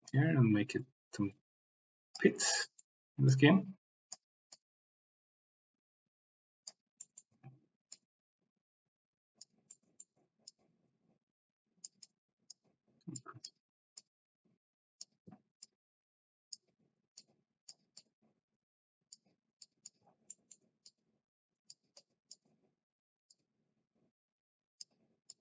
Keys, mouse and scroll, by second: 0.0-2.2 drag, 2.4 middle click, 3.3 click, 4.5-6.7 drag, 7.0 middle click, 7.9-9.5 drag, 9.7 middle click, 10.4-11.8 drag, 12.0 middle click, 13.1 click, 13.9 middle click, 14.2 click, 15.6 click, 17.2 middle click, 18.0-19.2 middle drag, 19.5 click, 20.3 middle click, 20.8 click, 21.9 middle click, 22.0 click, 23.4-24.8 drag, 25.2 click.